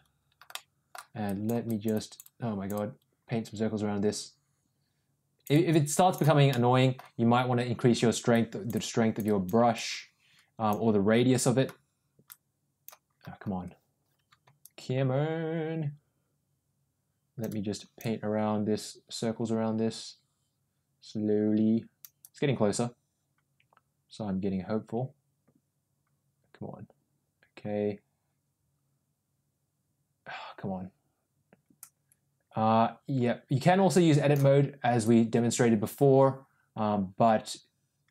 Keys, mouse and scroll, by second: 0.4 middle click, 1.1 click, 1.6-6.1 drag, 6.4 middle click, 8.2-9.4 drag, 9.6-10.6 drag, 12.1 click, 14.5-22.0 drag, 22.1-34.3 drag, 34.9-38.1 drag.